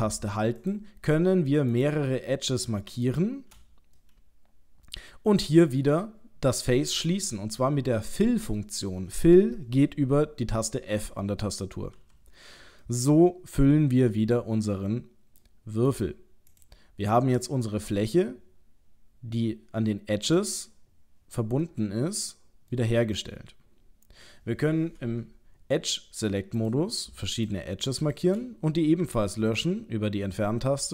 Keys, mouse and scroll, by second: 0.6 shift+click, 1.7 shift+click, 4.0 middle click, 7.3 middle click, 12.0 f, 12.8 middle click, 15.9 click, 16.5 click, 17.1 middle click, 21.6 middle click, 26.5 click, 27.4 shift+click, 29.0 Delete.